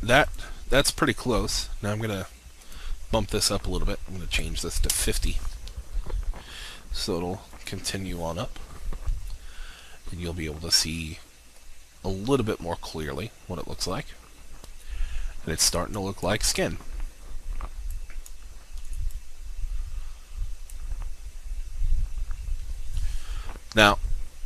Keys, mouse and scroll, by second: 0.4-3.8 drag, 4.5 typing, 5.0 Return, 16.1-21.0 drag, 21.8-23.2 scroll down 1.